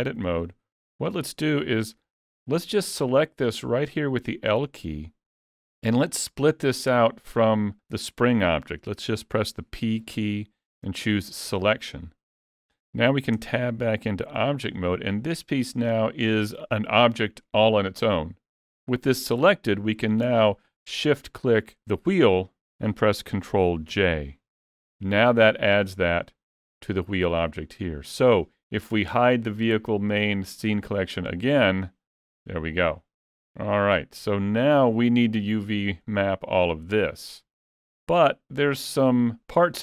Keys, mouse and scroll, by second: 0.6 alt+a, 0.9 middle click, 13.4 Tab, 14.4 alt+a, 15.2 click, 21.3 shift+click, 25.4 middle click, 26.6 click, 31.5 click, 32.3 middle click, 35.4 middle click, 38.1 middle click.